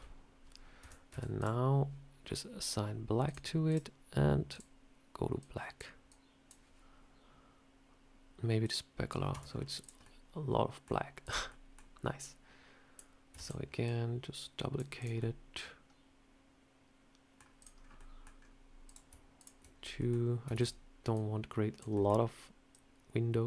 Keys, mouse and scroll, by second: 0.7 Tab, 1.0 Tab, 1.3 click, 3.1 click, 3.6 click, 4.4 click, 8.5 click, 9.2 Tab, 9.4 scroll down 1, 9.7 click, 9.9 middle click, 11.1 click, 11.4 middle click, 11.4 scroll up 1, 11.7 scroll down 1, 12.1 click, 13.3 shift+d, 13.7 click, 14.9 click, 15.1 middle click, 17.5 click, 17.7 scroll down 1, 17.9 middle click, 18.2 scroll down 3, 18.7 click, 19.3 shift+click, 19.6 scroll up 1, 19.9 middle click, 20.4 shift+d, 21.0 click, 21.8 middle click, 22.6 click.